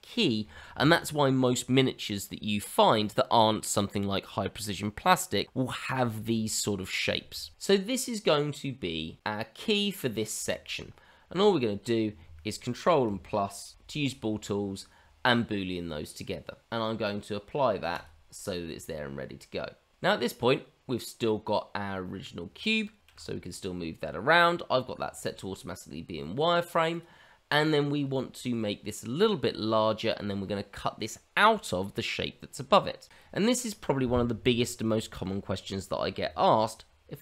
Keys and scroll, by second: 15.9 ctrl+KP_Add, 23.1 g.